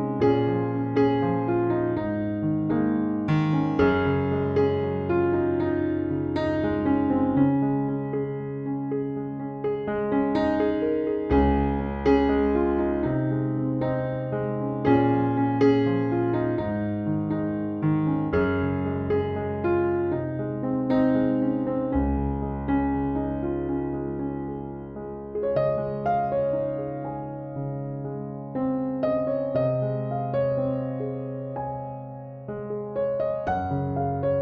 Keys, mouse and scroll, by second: 2.3 click, 3.2-4.6 right drag, 6.4 F11, 7.3 click, 9.6 Left, 11.3 Right, 12.0 Left, 14.1 Down, 15.1 Left, 17.4 Down, 18.1 Left, 19.3 Right, 20.6 Down, 21.2 Left, 23.4 Right, 23.9 Down, 24.4 Left, 25.6 Down, 26.0 Left, 26.7 Right, 27.9 Down, 28.3 Left, 29.4 Right, 30.1 Down, 30.6 Left, 31.8 Right, 32.4 Down, 32.8 Left, 33.8 Right.